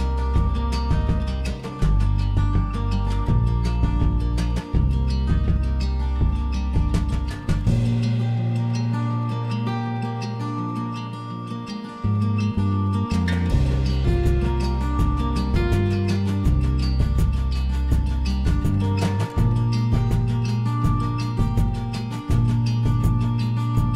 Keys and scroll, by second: 17.1 ctrl+a, 18.8 ctrl+h, 19.9 s, 21.2 s.